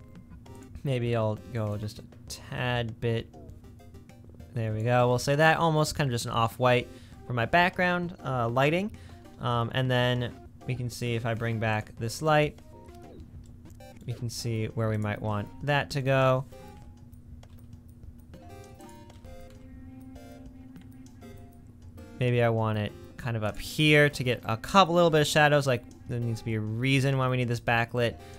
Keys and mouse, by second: 13.4 middle click, 16.7 g, 19.1 g, 23.7 click, 23.9-26.8 middle drag.